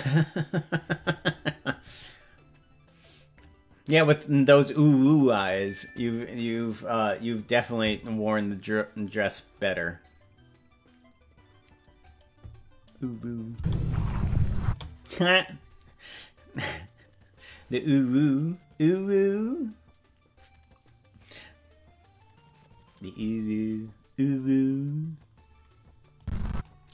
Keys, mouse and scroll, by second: 13.5 space, 14.6 space, 26.1 click.